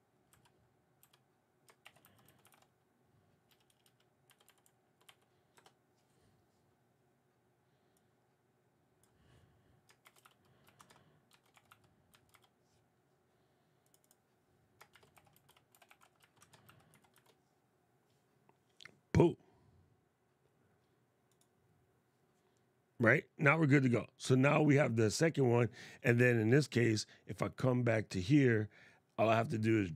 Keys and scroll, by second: 1.5 shift+l, 9.7 shift+h, 10.9 shift+c, 14.6 shift+r, 16.1-17.3 typing.